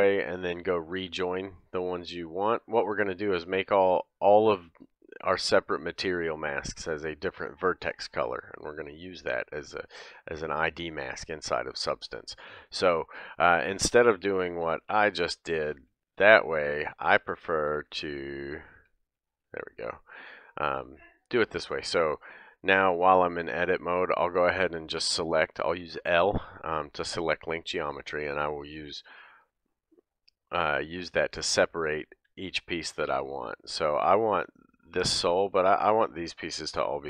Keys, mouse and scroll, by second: 0.5 ctrl+click, 1.0 ctrl+shift+middle click, 1.5-9.6 shift+drag, 9.6-14.7 middle drag, 14.4 ctrl+z, 14.7 ctrl+z, 14.9 ctrl+z, 15.3 ctrl+z, 15.8 ctrl+z, 16.2 ctrl+z, 16.7 ctrl+z, 17.1 ctrl+z, 17.8 ctrl+z, 18.7 ctrl+z, 19.1 ctrl+z, 21.1 click, 22.2 scroll up 1, 22.3-30.6 middle drag, 22.6-23.1 scroll down 1, 23.1-23.5 scroll down 2, 23.5 scroll up 1, 30.6 click, 30.8-37.0 middle drag, 32.3 l, 36.0-37.0 typing.